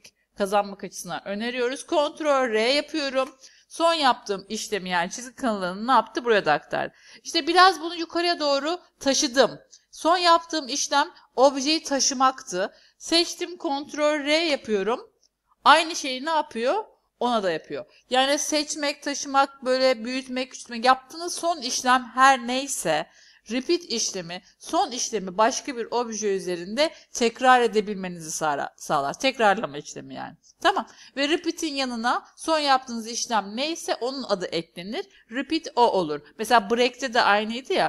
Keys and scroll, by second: 2.9 ctrl+r, 14.3 ctrl+r.